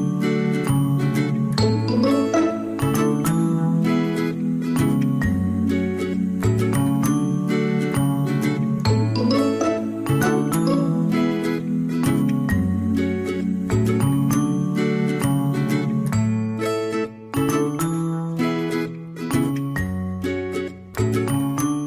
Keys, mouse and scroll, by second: 2.4 ctrl+z, 2.7 ctrl+z, 6.4 ctrl+z, 7.1 ctrl+z, 17.8 ctrl+z.